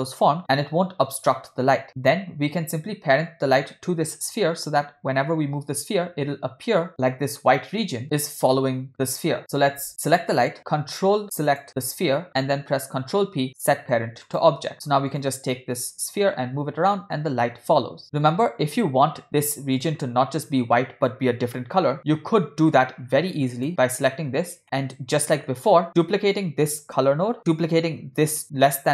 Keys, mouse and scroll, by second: 10.1 click, 11.4 ctrl+click, 12.9 ctrl+p, 15.1 click, 16.2 g, 23.0-23.5 scroll down 2, 23.6 click, 25.1 scroll down 1, 25.2 middle click, 26.1 click, 27.3 shift+d, 28.2 click, 28.2 scroll down 1.